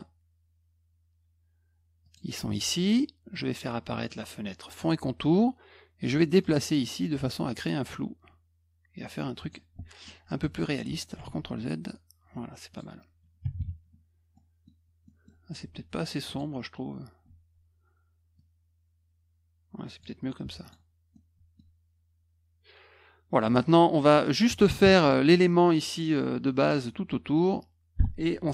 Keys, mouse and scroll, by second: 2.0 click, 4.8 click, 6.4-9.5 drag, 10.0 middle click, 11.2 ctrl+z, 12.7 click, 14.3 middle click, 15.0 middle click, 15.6 F2, 16.2 click, 18.3 click, 20.4 F1, 20.6 click, 21.1 middle click, 23.4 middle click.